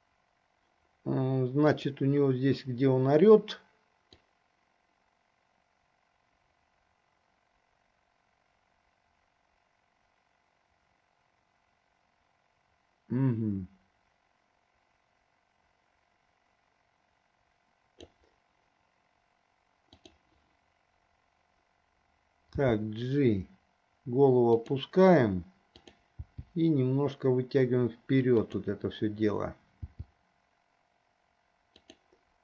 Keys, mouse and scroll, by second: 1.8 click, 4.3-18.4 drag, 20.0 click, 22.8 g, 26.1 click, 26.5 g, 30.1 g.